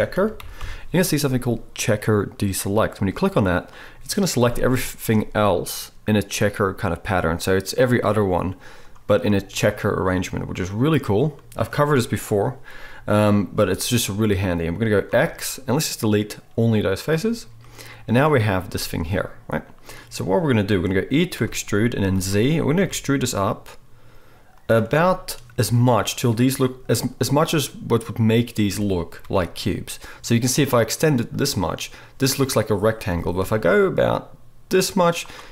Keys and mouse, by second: 11.9-16.9 drag, 11.9-16.9 right drag, 15.0 x, 16.9-24.7 middle drag, 18.6 a, 21.4 e, 24.7-35.5 right drag, 28.7 g, 33.1 g.